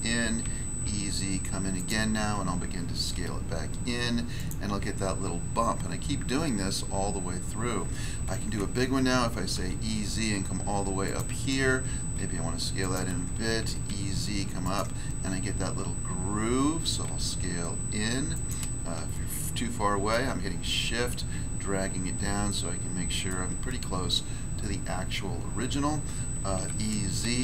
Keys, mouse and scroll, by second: 0.4 e, 0.8 z, 1.7 click, 4.3 click, 4.3 s, 5.8-6.9 scroll down 2, 8.2 e, 9.5 z, 11.0 click, 12.1 s, 12.8 click, 13.6 e, 13.9 z, 14.6 click, 17.0 s, 18.3 click, 19.1 shift+middle click, 20.8 scroll up 1, 22.4 shift+middle click, 24.8-26.5 scroll down 1, 26.5 e, 27.3 z.